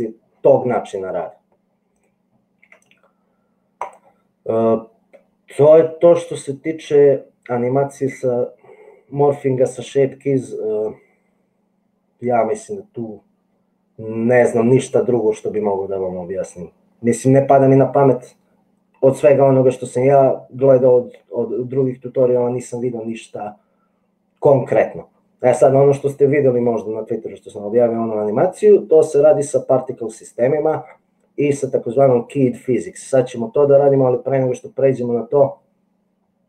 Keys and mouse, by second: 2.9 x.